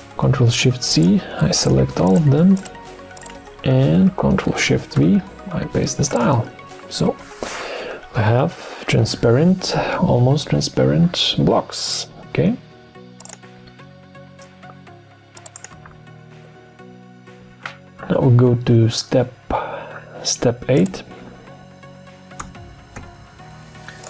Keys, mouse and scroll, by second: 1.6 shift+click, 2.1 shift+click, 2.6 shift+click, 2.6 shift+double click, 3.2 shift+click, 4.9 ctrl+shift+v, 15.8 ctrl+d, 22.3 BackSpace, 22.9 8.